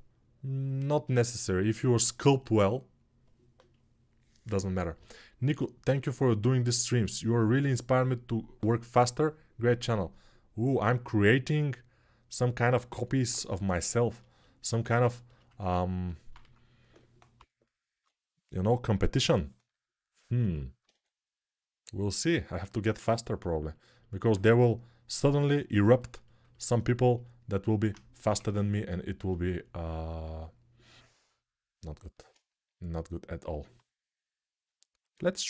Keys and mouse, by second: 16.1-17.8 typing, 20.7 3, 26.4-28.7 alt+shift+right drag, 28.1 ctrl+Tab, 28.7-35.4 alt+middle drag.